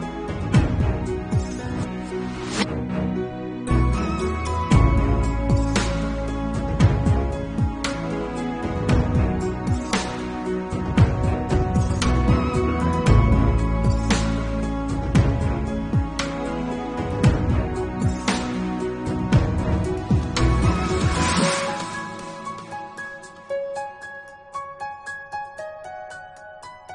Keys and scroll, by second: 0.5 ], 0.7 [, 1.9 ctrl+alt+z, 2.0 ], 3.2 [, 4.6 5, 5.1 ctrl+alt+z, 5.3 ], 5.6 1, 7.7 8, 7.9 [, 9.8 1, 10.0 [, 12.1 ctrl+s, 13.3 ], 13.6 4, 16.1 ctrl+alt+z, 16.4 2, 18.6 ctrl+s, 20.2 ctrl+alt+z, 20.4 1, 21.7 4, 21.9 [, 23.3 ctrl+alt+z, 24.6 ], 25.0 ctrl+alt+z, 25.3 1, 26.1 ctrl+s.